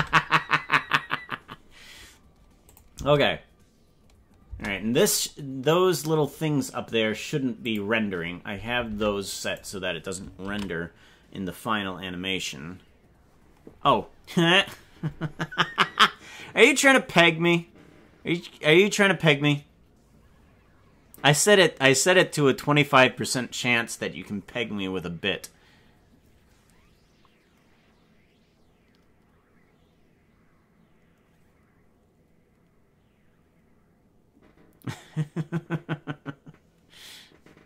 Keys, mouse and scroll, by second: 0.0 space, 2.8 click, 3.0 space, 4.6 space, 7.7 click, 8.9 ctrl+Tab, 9.8 right click, 10.6 ctrl+s.